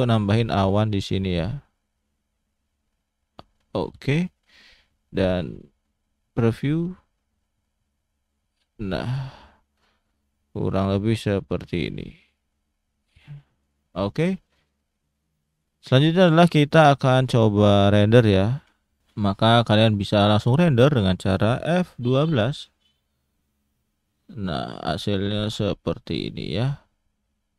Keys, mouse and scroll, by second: 0.2 middle click, 1.7 click, 4.5 click, 6.3 click, 10.6 s, 12.3 click, 13.6 click, 14.8-16.8 scroll down 1, 22.4 F12.